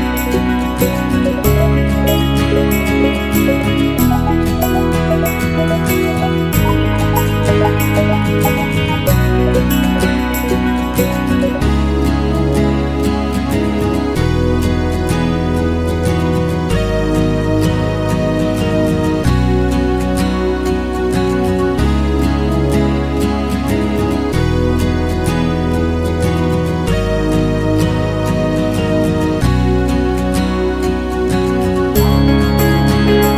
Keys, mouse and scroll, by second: 0.0 scroll up 1, 0.1-1.2 alt+drag, 1.2 shift+b, 1.4 f, 1.8 alt+right click, 2.0 alt+click, 2.2 alt+middle click, 2.3-3.4 alt+drag, 3.4 f, 3.7 click, 4.1 ctrl+z, 5.0 f, 5.4-8.2 drag, 8.2 alt+right click, 8.4 alt+middle click, 8.5 alt+right click, 8.6-10.3 alt+drag, 10.3 alt+middle click, 10.6 click, 11.5 alt+middle click, 11.7 click, 12.7 alt+middle click, 12.8 click, 13.2 alt+middle click, 13.4-19.1 drag, 19.8 alt+click, 20.0 alt+middle click, 20.1-23.7 alt+drag, 23.7 alt+middle click, 23.8 alt+click, 23.9 alt+middle click, 24.0-25.3 alt+drag, 25.5 click, 26.4 alt+middle click, 26.5 alt+click, 26.7 alt+middle click, 26.8 alt+click, 27.2 alt+right click, 27.3 alt+middle click, 27.5-33.3 drag, 33.3 alt+middle click.